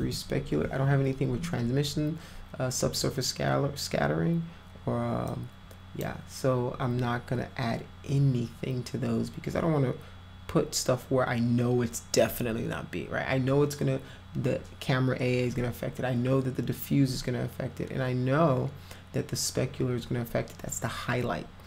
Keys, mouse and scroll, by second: 0.0 3, 5.3 click.